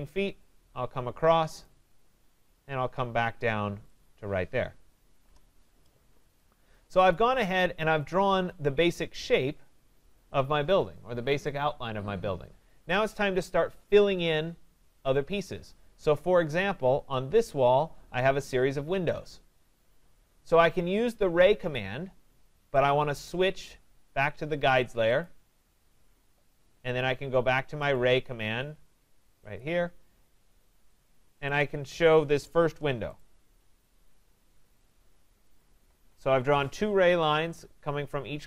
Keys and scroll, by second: 5.2 Return, 32.6 Return.